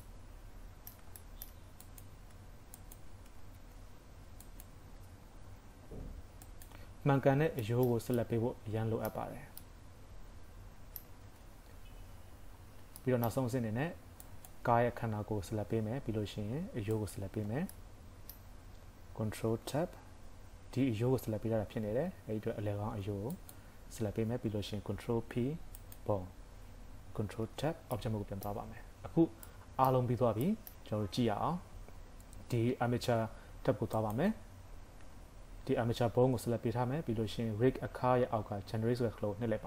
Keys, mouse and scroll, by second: 0.0 middle click, 1.2 shift+middle click, 1.9 click, 2.8 shift+click, 3.6 ctrl+Tab, 4.5 click, 5.5 ctrl+p, 7.2 scroll down 3, 7.6 shift+middle click, 8.2 middle click, 9.3 scroll up 2, 9.6 middle click, 11.3 ctrl+Tab, 12.0 scroll down 2, 12.3 KP_3, 12.6 scroll up 2, 13.0 shift+middle click, 14.3 click, 15.0 scroll down 2, 15.9 scroll up 2, 16.9 shift+click, 17.5-17.9 scroll down 3, 17.7 middle click, 18.5 scroll up 2, 19.5 ctrl+Tab, 23.3 click, 24.9 ctrl+p, 27.5 ctrl+Tab, 27.9 middle click, 28.5 KP_3, 28.7 scroll down 2, 29.5 middle click, 29.5 scroll down 1, 30.2 scroll up 2, 30.5 middle click, 33.9 click.